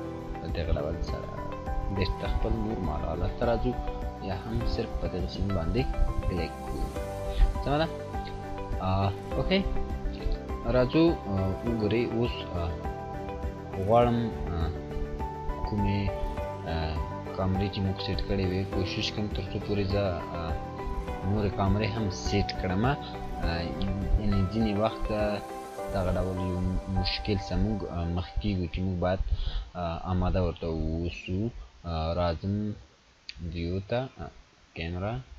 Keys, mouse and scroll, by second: 0.8 click, 3.6-4.3 scroll down 1, 5.3 click, 13.6 click, 18.2 click, 21.0-21.6 scroll up 1, 21.7-23.3 scroll up 1, 23.5 click, 26.4 click, 28.7-29.6 click, 29.7-30.4 scroll down 1, 31.1-32.0 drag.